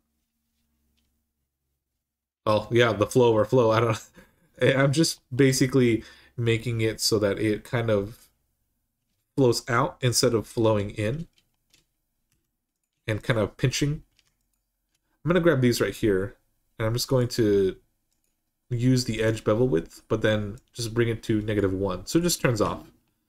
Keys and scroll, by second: 12.1 2, 22.4 Tab.